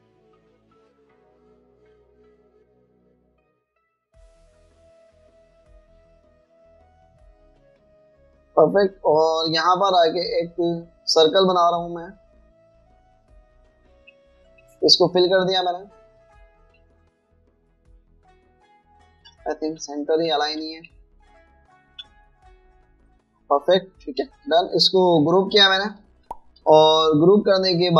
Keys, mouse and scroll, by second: 0.9 double click, 1.5 alt+scroll up 1, 6.0 alt+shift+click, 11.0 right click, 12.9 alt+scroll up 1, 14.1 alt+shift+click, 15.6-17.2 typing, 16.9 alt+scroll down 1, 17.7 alt+click, 21.0 shift+click, 23.5 alt+scroll down 2, 27.6 ctrl+g.